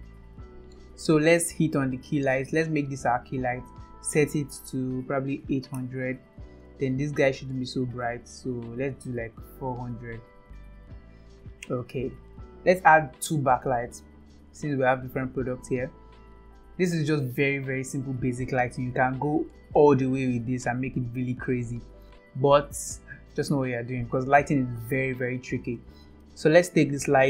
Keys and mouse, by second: 4.0-6.2 drag, 5.3 KP_0, 8.7-11.0 drag, 9.8 KP_0, 15.9 click, 26.6 click.